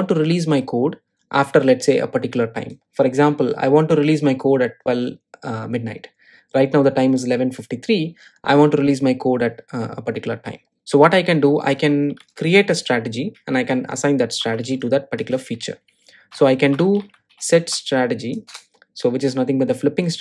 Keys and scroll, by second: 14.2 Delete.